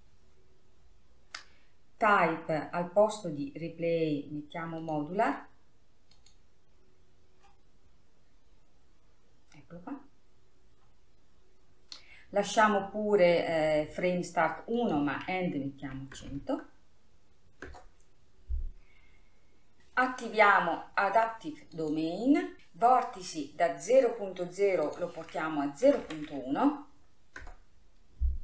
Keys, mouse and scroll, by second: 0.9 scroll down 1, 5.5-8.5 drag, 9.0-11.2 scroll down 3, 11.2-13.5 scroll down 1, 13.5-14.4 scroll down 1, 15.5-17.0 drag, 17.0 KP_0, 19.8-22.3 scroll up 10, 22.5 click, 22.6-24.2 scroll up 1, 25.5-28.4 drag.